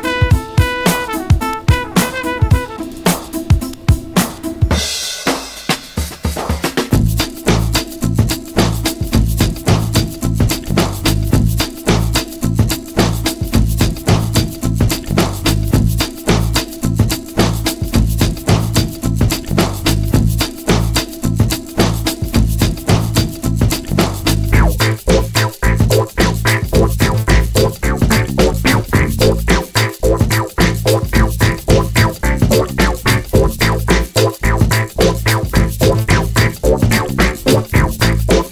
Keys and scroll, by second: 3.6 2, 3.7 Return, 7.3 super+c, 7.7 super+v.